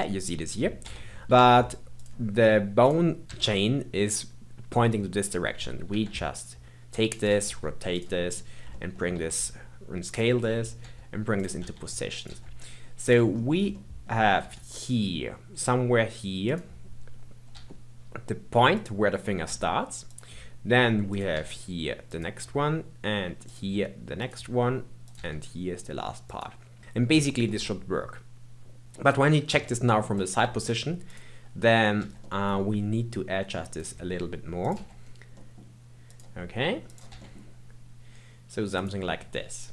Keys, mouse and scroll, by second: 0.8 Tab, 1.2 a, 1.9 click, 2.1 scroll up 1, 2.8 click, 5.8 r, 7.5 g, 8.3-8.7 scroll up 2, 8.7 shift+middle click, 9.1 s, 10.4-10.8 scroll up 2, 10.8 g, 11.5 r, 12.2 g, 13.3-13.7 scroll up 4, 13.7-14.4 shift+middle drag, 14.4 g, 17.5 g, 19.4 g, 21.0 click, 21.3 g, 23.4 click, 23.5 g, 25.0 click, 25.1 g, 26.7-27.4 scroll down 1, 27.4-29.3 middle drag, 29.5 KP_3, 30.1-31.0 scroll up 1, 31.0 click, 32.0 g, 34.6 click, 34.7 g, 36.8 click, 37.1 g.